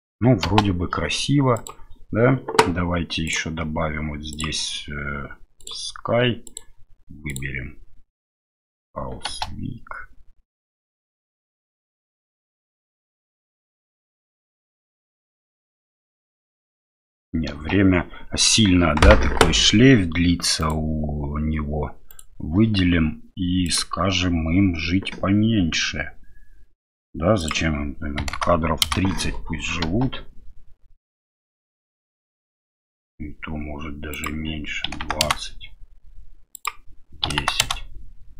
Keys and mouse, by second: 0.4 space, 1.6 click, 3.2 click, 4.3-5.7 drag, 6.6 click, 9.3 space, 17.6 space, 20.7 right click, 22.1 right click, 27.4-29.2 drag, 29.9 space, 34.1-35.8 drag, 36.6-38.3 drag.